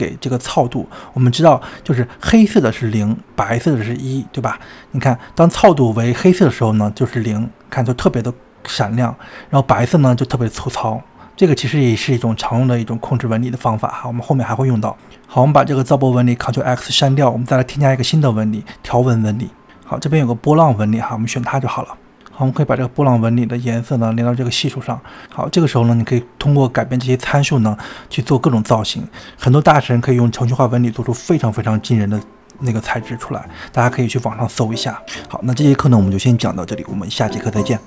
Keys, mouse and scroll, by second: 3.9 scroll down 4, 4.4-5.1 scroll down 1, 5.1-8.6 middle drag, 8.6 scroll up 2, 10.4-13.4 drag, 16.8 click, 18.0 click, 19.1 ctrl+x, 19.3 click, 19.5 shift+a, 22.5 click, 25.1-25.5 scroll down 2, 25.5-28.6 middle drag, 29.0-35.0 drag, 35.1-37.6 drag.